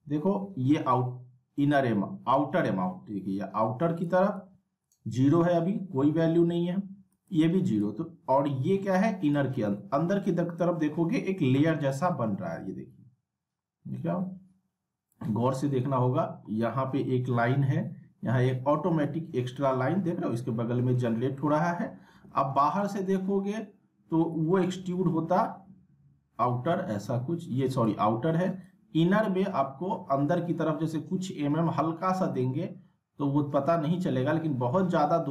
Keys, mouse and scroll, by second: 4.3 ctrl+z, 4.9 ctrl+z, 7.1 right click, 7.8-9.3 drag, 9.7 ctrl+z, 11.9-15.3 drag, 15.8 ctrl+z, 16.5-18.4 scroll up 1, 18.4-19.6 drag, 21.0 ctrl+z, 21.6-22.0 scroll down 1, 22.0 alt+w, 22.8 alt+middle click, 24.3-28.1 drag.